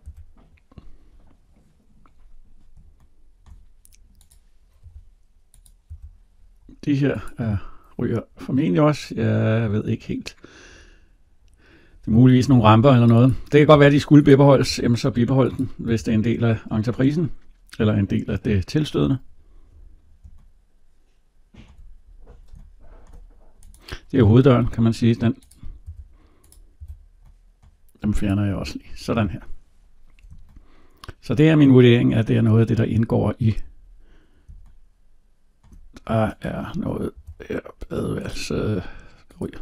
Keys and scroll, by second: 0.0 Delete, 12.4 Delete, 24.4 Delete, 37.0 Delete.